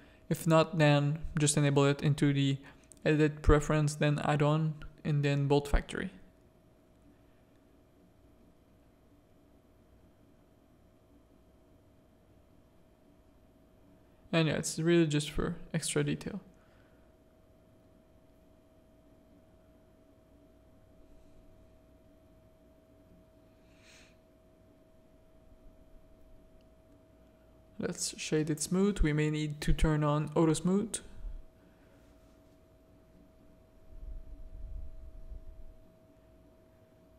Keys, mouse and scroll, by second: 0.8 s, 1.9 s, 2.7 s, 4.3 s, 6.4 s, 8.1 g, 9.2 r, 11.8 middle click, 12.9 middle click, 13.4 shift+middle click, 15.8 middle click, 16.1 shift+middle click, 16.8 middle click, 17.6 shift+middle click, 18.2 middle click, 19.5-20.7 drag, 21.1 middle click, 22.0 middle click, 23.3 click, 24.4 g, 25.3 middle click, 27.1-28.6 drag, 28.9 middle click, 30.6 Tab, 30.8 a, 31.7 middle click, 32.9 Tab, 33.6 middle click, 35.6 shift+a.